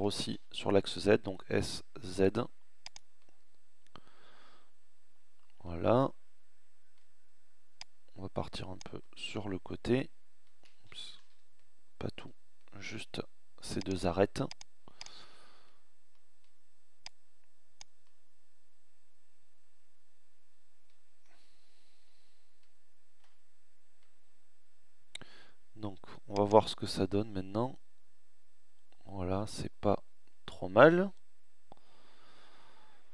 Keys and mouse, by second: 3.9 middle click, 8.6-10.1 drag, 10.2 ctrl+z, 12.9 click, 19.2 middle click, 22.2 Tab.